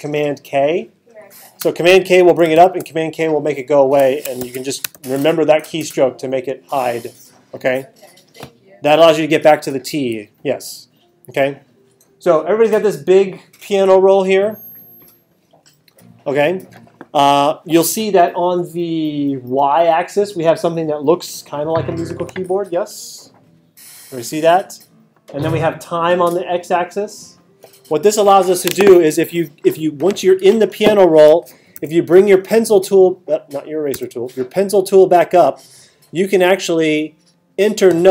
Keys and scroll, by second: 1.9 super+k, 4.4 super+k, 31.8 t, 33.9 t.